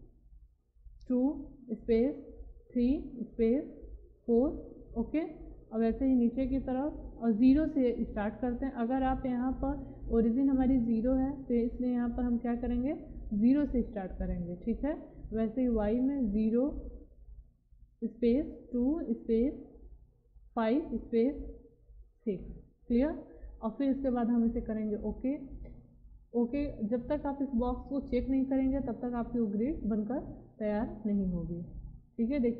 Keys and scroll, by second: 0.9 2, 1.7 space, 2.7 3, 3.2 space, 4.2 4, 13.3 0, 13.9 space, 16.2 0, 16.7 space, 18.7 2, 19.1 space, 20.6 5, 20.9 space, 22.3 6.